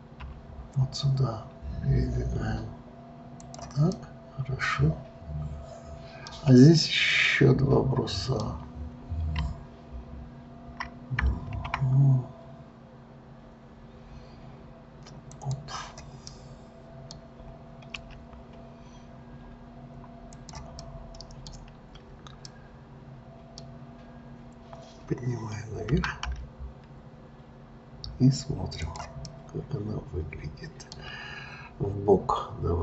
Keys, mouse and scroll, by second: 3.9-6.9 middle drag, 7.1-10.1 middle drag, 11.5 shift+a, 16.3-18.0 middle drag, 18.0 s, 20.8-25.5 middle drag, 25.9 g, 29.3-32.3 middle drag.